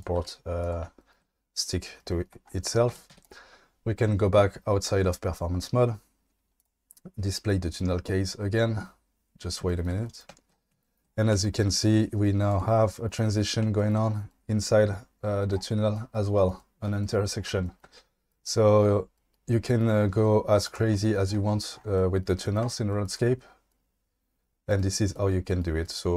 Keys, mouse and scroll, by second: 0.2 g, 2.9 Tab, 3.1 q, 9.0 click, 12.5 click, 20.6 click.